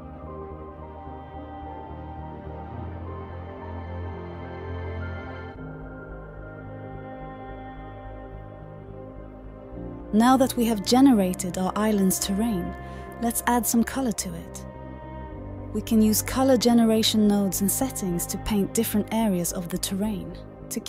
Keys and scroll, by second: 0.0-0.1 typing, 10.9-12.6 typing, 13.9 Down, 14.0 Down, 14.3 Down, 14.3 Return, 14.5 typing.